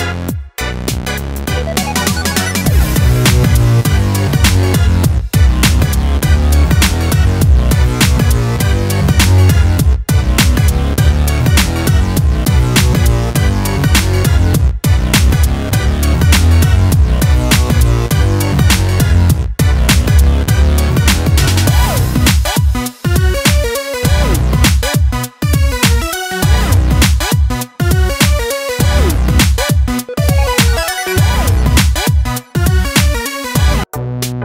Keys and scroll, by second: 0.3 ctrl+alt+z.